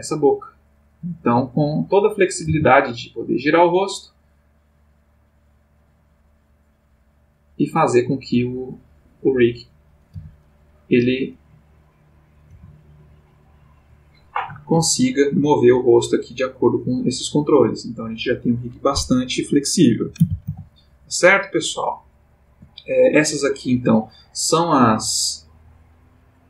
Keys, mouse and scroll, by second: 1.3 click, 2.4 r, 3.4 click, 4.3-9.4 drag, 9.9 click, 10.2 g, 11.0 click, 12.3 click, 12.5 g, 13.5 click, 14.8-15.5 ctrl+middle drag, 17.2-18.1 drag, 20.2 alt+r, 20.5 alt+g, 23.7 click, 24.9 click.